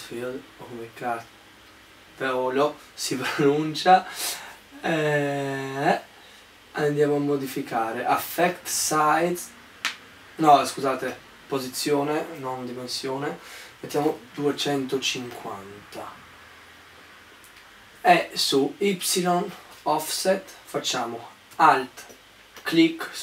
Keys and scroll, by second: 13.5-15.6 typing.